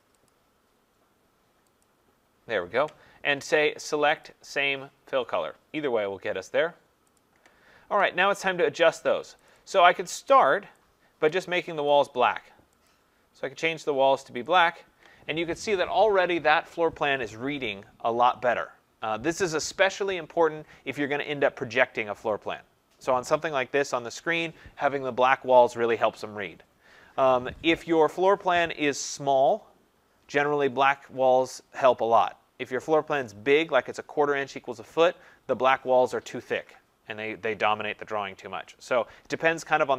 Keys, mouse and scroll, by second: 0.3 click, 1.8 click, 4.2 click, 7.2 click, 9.5 click, 9.7 click, 11.9 click, 12.9 click, 14.6 click.